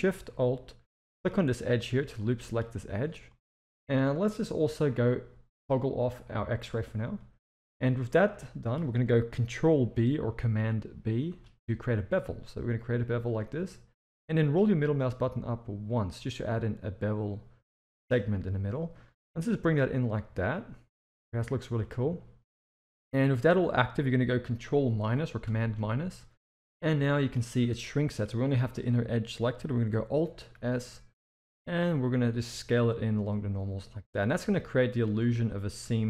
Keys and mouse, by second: 1.1 alt+shift+click, 2.2 middle click, 3.3 middle click, 6.6 click, 7.1 middle click, 8.3-8.7 middle drag, 11.3 ctrl+b, 25.4 ctrl+KP_Subtract, 26.7 middle click, 28.0 middle click, 30.5 alt+s, 34.6 middle click, 35.6 middle click, 35.8 Tab.